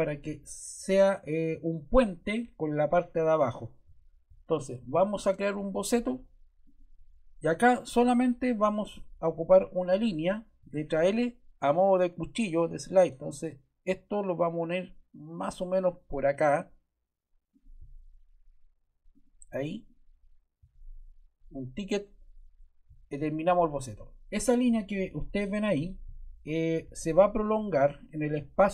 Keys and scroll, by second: 10.5 l.